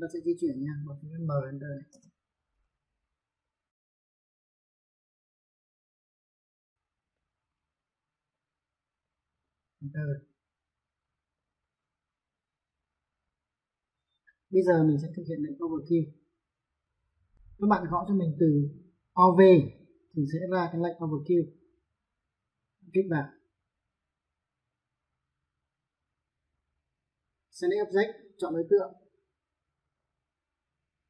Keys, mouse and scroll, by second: 1.4 m, 1.7 space, 3.2 click, 3.5 middle click, 6.0 click, 6.9 middle click, 8.0 click, 9.5 space, 11.1 click, 13.4 click, 16.0 v, 24.5 click, 28.9 click.